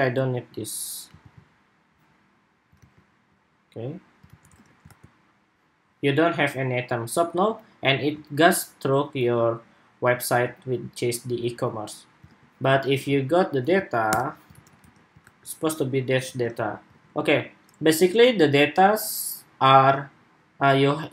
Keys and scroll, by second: 1.1 super+x, 2.6 super+v, 4.0 super+s, 4.4 super+Tab, 4.6 super+r, 12.0 super+Tab, 13.8 super+/, 14.4 super+s, 14.6 super+Tab, 15.0 super+r, 16.1 super+Tab, 16.8 super+Tab.